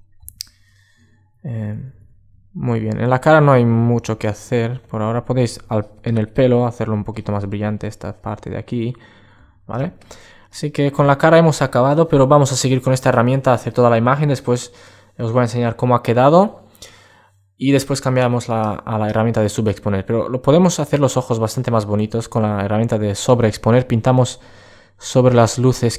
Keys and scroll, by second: 18.8 super+space.